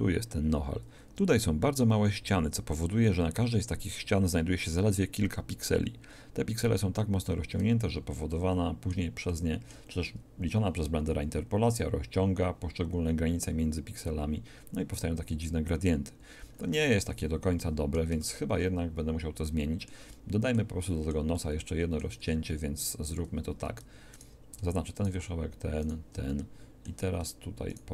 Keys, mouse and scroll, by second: 0.1-5.5 middle drag, 7.6 Tab, 11.3-16.1 middle drag, 16.5-17.6 middle drag, 18.1 Tab, 24.1 click, 26.5 shift+click.